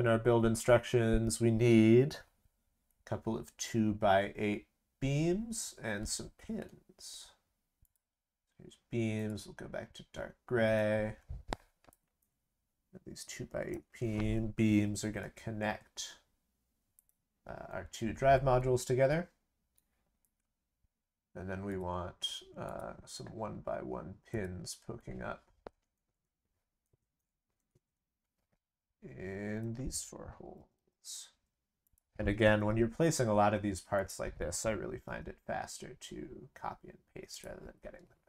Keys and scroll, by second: 15.0 ctrl+c, 15.2 ctrl+v, 30.6 ctrl+c, 30.7 ctrl+v, 32.5 ctrl+c, 32.7 ctrl+v, 35.0 ctrl+v.